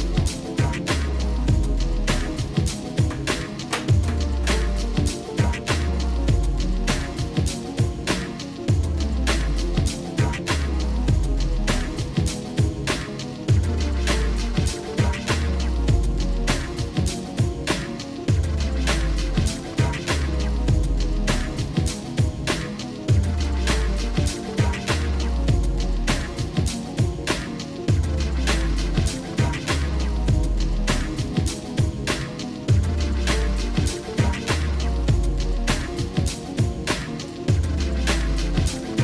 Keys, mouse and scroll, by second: 0.0 scroll down 2, 0.2 shift+middle click, 5.6 middle click, 6.4 scroll up 1, 6.8-8.0 shift+middle drag, 8.2 middle click, 9.0 shift+middle click, 10.1 middle click, 10.7 shift+middle click, 11.5 middle click, 12.5 scroll up 1, 13.9 middle click, 14.9-17.0 shift+middle drag, 17.4 middle click, 17.9-21.2 shift+middle drag, 23.3 click, 25.3-28.9 shift+middle drag, 30.3-37.5 drag, 38.0-39.0 shift+middle drag.